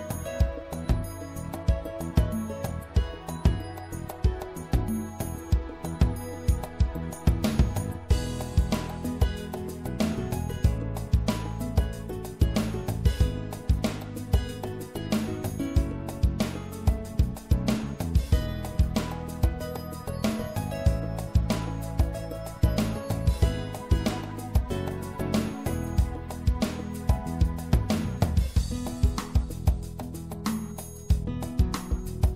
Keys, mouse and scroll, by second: 3.4-6.8 middle drag, 7.4-10.1 middle drag, 11.7-13.6 drag, 13.6 middle click, 15.7-17.2 drag, 17.2 middle click, 21.0-25.6 middle drag, 25.6 z, 28.2 b, 30.4 middle click, 31.4 b.